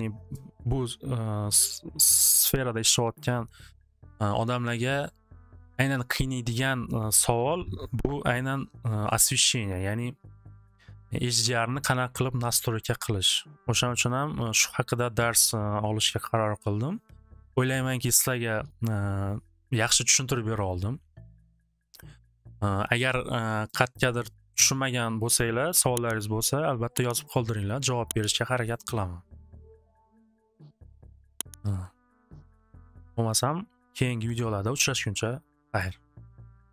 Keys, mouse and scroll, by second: 2.5-3.6 drag, 23.1 click, 24.6 click, 25.4 click, 25.9 click, 28.0 click, 28.3 click, 28.7 click, 30.7 click, 31.0 click.